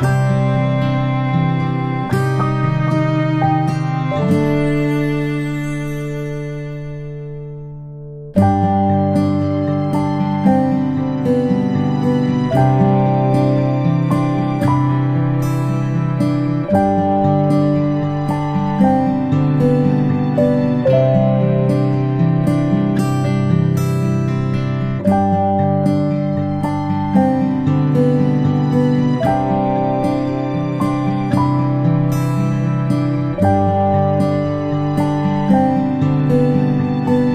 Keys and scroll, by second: 14.0-14.4 ctrl+shift+space, 15.8 p, 17.6 space, 23.6 ctrl+z, 23.9 space, 25.6 space, 27.2 space, 27.5 space, 30.2 space.